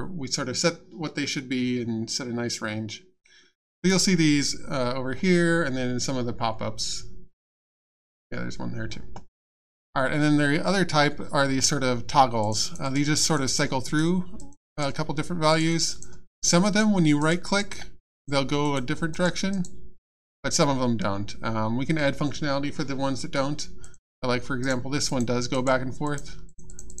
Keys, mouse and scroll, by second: 12.4 click, 13.8 click, 15.5 click, 16.4 right click, 17.4 right click, 18.1 click, 19.1 right click, 23.8 click, 24.6 right click, 25.1 click, 25.5 right click, 26.0 click.